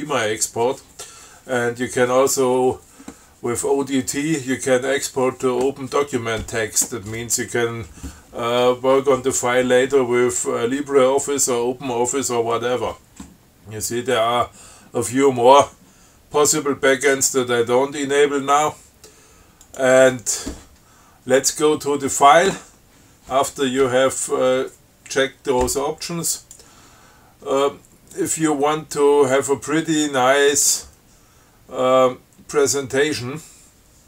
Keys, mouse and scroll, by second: 16.7 scroll down 2, 17.2 scroll up 2, 19.9 click, 26.6 click, 28.4 click.